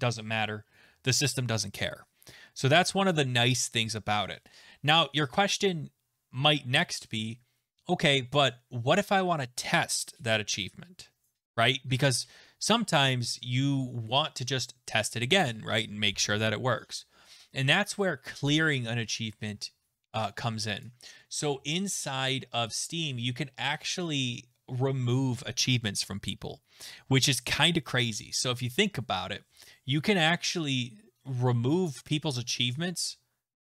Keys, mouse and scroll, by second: 20.8 click, 22.7 click, 27.7 click.